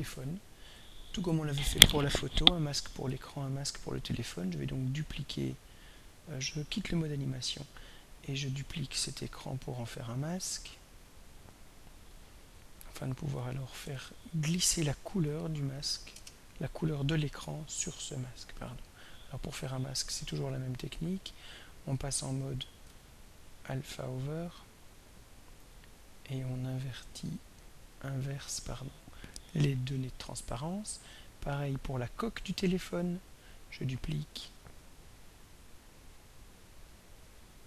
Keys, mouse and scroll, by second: 3.9 click, 7.5 click, 8.6 click, 10.2 drag, 11.3 click, 12.1 click, 12.6 click, 12.9 click, 13.8 Home, 14.3-15.8 typing, 16.1 Return, 18.3 click, 21.0 click, 21.9 click, 22.9 click, 24.3-24.9 scroll down 2, 26.0 click, 27.3 click, 28.0 click, 31.3 click, 32.3 click, 33.3 click, 34.6 click, 35.9 click, 36.8 click.